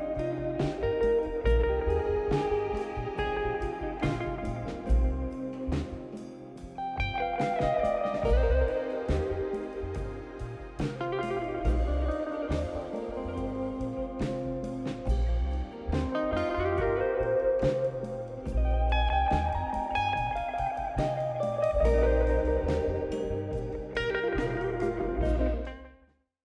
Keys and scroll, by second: 5.7-6.6 typing, 7.7 ctrl+d, 8.5-9.3 typing.